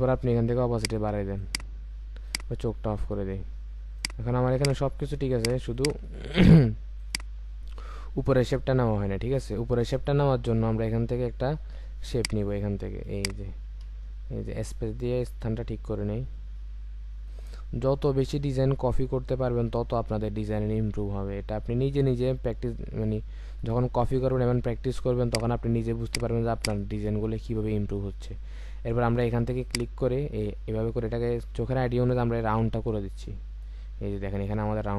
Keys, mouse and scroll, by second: 5.7 double click, 7.9-8.4 alt+scroll down 1, 13.8 space, 26.5 double click.